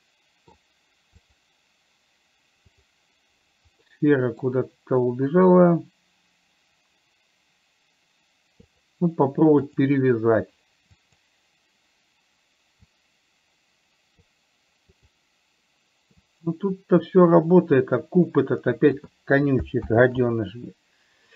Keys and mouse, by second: 0.3-0.9 middle drag, 1.5 click, 4.3 middle click, 9.1 click, 9.9 click, 13.4-14.5 drag, 15.3 click, 16.6-19.4 drag, 20.3 ctrl+z.